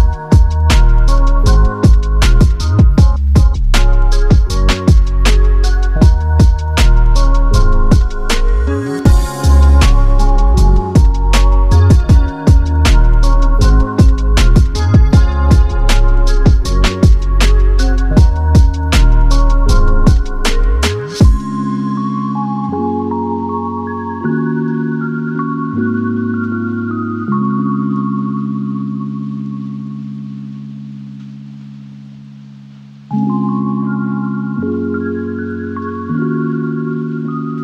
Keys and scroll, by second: 1.3 space, 9.5 r, 35.5 space.